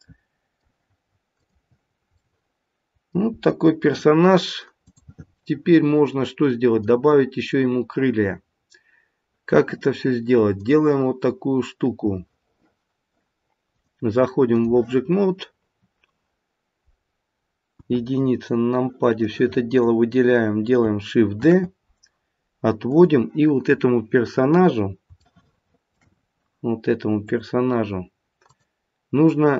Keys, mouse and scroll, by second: 1.4 click, 1.8-2.7 scroll down 3, 2.7 middle click, 3.2-4.8 scroll up 2, 4.8 click, 5.3 middle click, 5.7 middle click, 10.5 click, 17.7 KP_1, 18.4-19.2 scroll down 3, 19.2 click, 21.4 shift+d, 23.8-24.3 scroll up 3, 24.3-25.0 scroll down 1, 25.2 shift+middle click, 26.2-27.2 scroll down 1, 27.2 click, 28.4 click.